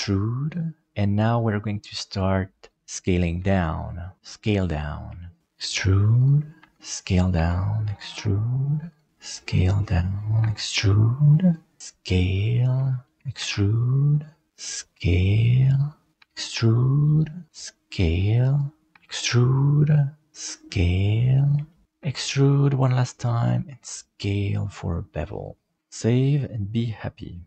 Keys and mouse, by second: 3.3 s, 5.2 shift+middle click, 5.4 e, 6.6 s, 7.3 e, 9.1 s, 10.4 e, 11.7 s, 13.3 e, 14.5 s, 16.1 e, 17.5 s, 18.9 e, 20.3 s, 21.6 shift+middle click, 21.9 e, 23.6 s, 25.8 ctrl+s.